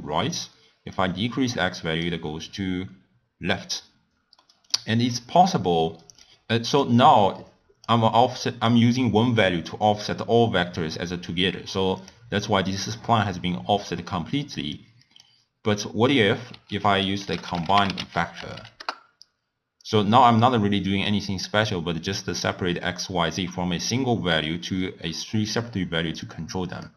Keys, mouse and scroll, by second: 0.9-3.9 drag, 4.4-6.2 middle drag, 6.2 click, 7.4 click, 8.3-11.3 drag, 11.9 click, 14.7-16.7 drag, 16.7 ctrl+a, 18.5 Down, 26.2-26.9 drag.